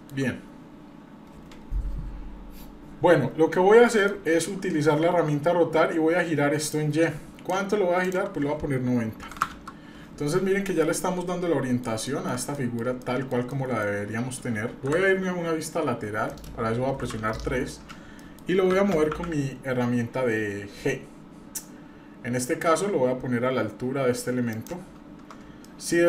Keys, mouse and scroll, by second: 4.1-4.5 shift+middle drag, 6.7 click, 8.0 click, 10.8-11.8 middle drag, 12.1 shift+middle click, 12.5 middle click, 13.0 shift+middle click, 13.5 middle click, 14.8 KP_3, 16.3 middle click, 17.0 KP_3, 17.6-18.0 scroll down 2, 18.2 shift+middle click, 19.1 g, 24.9-25.4 scroll up 2, 25.6 shift+middle click, 25.9 shift+scroll up 2.